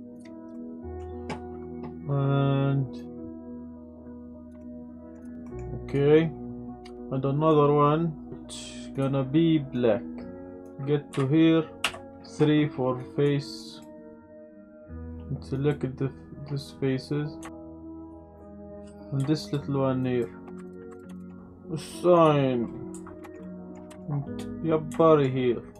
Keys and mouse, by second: 0.2 click, 3.0-4.5 drag, 4.6-5.1 middle drag, 5.2 click, 5.4 middle drag, 7.5 click, 8.9 click, 10.7 Tab, 11.1 z, 11.8 3, 13.1 click, 13.6 click, 14.2 shift+click, 14.5 shift+click, 14.7 shift+click, 15.0 shift+click, 17.5 shift+middle click, 18.6 ctrl+z, 19.4 shift+click, 20.1 shift+click, 20.7 ctrl+click, 20.9 ctrl+click, 21.2 shift+click, 22.9 Tab, 23.2 click, 23.4 click, 23.9 KP_Decimal, 25.0 shift+click, 25.7 click.